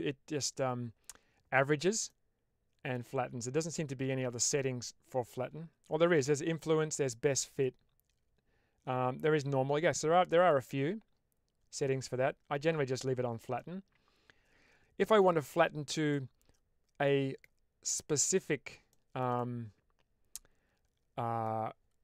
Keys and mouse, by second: 2.0 middle click, 4.3 click, 6.9-10.5 drag, 12.9 ctrl+z, 13.5-15.1 middle drag, 16.1-17.3 middle drag, 18.8 shift+middle click, 19.3-21.3 middle drag.